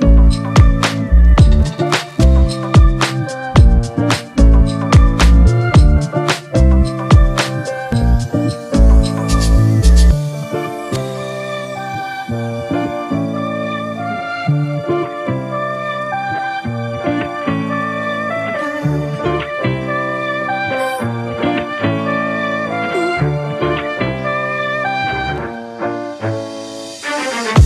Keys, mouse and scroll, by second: 2.4 typing, 3.6 double click, 10.0 ctrl+click, 12.5 right click, 20.2 alt+right click.